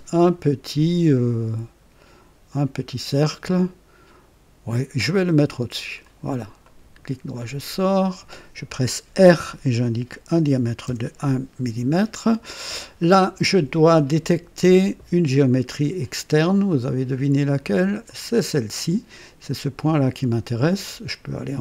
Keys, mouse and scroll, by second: 5.0 click, 6.0 click, 6.6 right click, 7.9 click, 9.2 r, 10.1 KP_1, 10.4 KP_1, 10.8 KP_Enter, 11.8 scroll up 1, 12.4 right click, 13.4 typing, 15.9 click, 18.0 click.